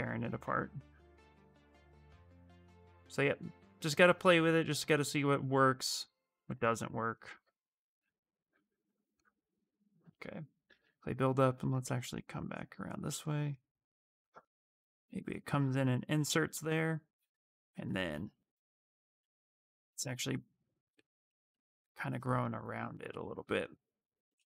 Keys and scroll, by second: 0.6 ctrl+z, 6.1 q, 8.3 ctrl+z, 8.5 ctrl+z, 10.1-11.0 typing.